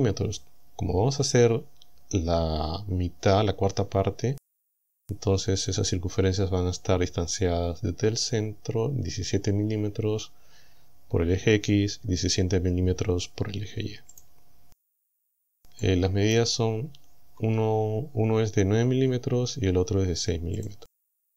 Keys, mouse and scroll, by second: 4.6 click, 14.2 click, 14.9-15.2 scroll down 2, 15.9 click, 16.8 scroll up 2, 17.1 scroll down 2, 17.4 scroll up 2, 20.6 click.